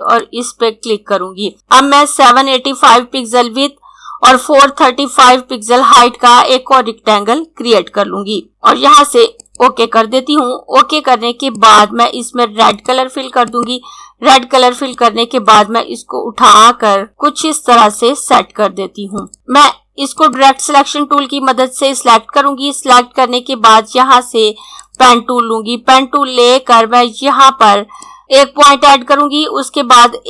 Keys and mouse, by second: 6.7 click, 7.0-8.6 typing, 9.4 click, 20.2 click, 24.7 click, 27.9 click.